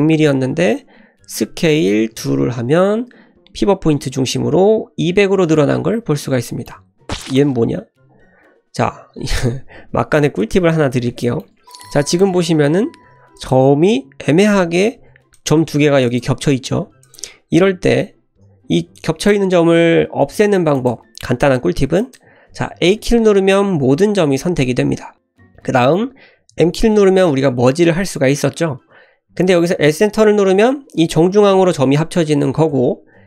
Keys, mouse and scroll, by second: 1.2 s, 6.4 shift+middle click, 7.1 click, 9.2 ctrl+z, 9.9 ctrl+z, 10.4 click, 11.2 shift+middle click, 11.9 click, 12.3 g, 14.8 ctrl+z, 15.3 click, 15.6 g, 16.7 ctrl+z, 17.0 click, 18.9 click, 20.7 click, 22.0 click, 22.9 a, 26.5 m, 32.7 m.